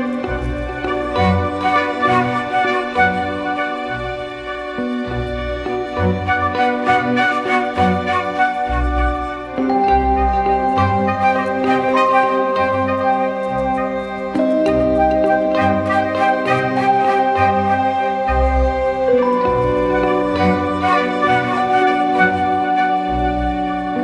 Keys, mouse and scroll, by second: 0.7 ctrl+-, 2.5 ctrl+-, 2.5 alt+scroll up 1, 6.5 alt+right click.